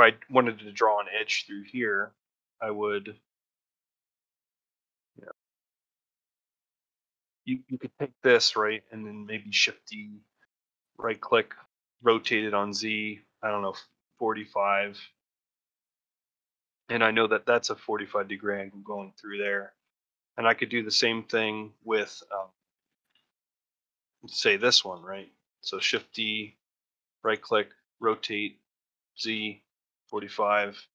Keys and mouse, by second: 4.0-5.0 middle drag, 6.6 shift+middle click, 7.1 click, 8.2 shift+middle click, 18.5 shift+middle click, 22.7 ctrl+shift+middle click.